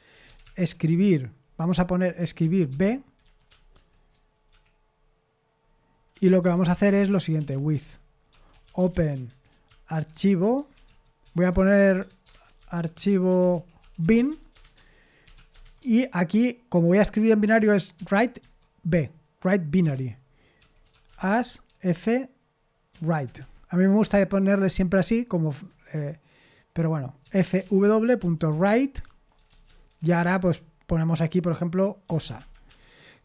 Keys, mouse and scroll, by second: 0.0-3.7 typing, 4.5 Escape, 6.0-16.1 typing, 17.7-18.9 typing, 20.6-23.4 typing, 25.5 Return, 27.0-30.6 typing, 31.8-33.2 typing.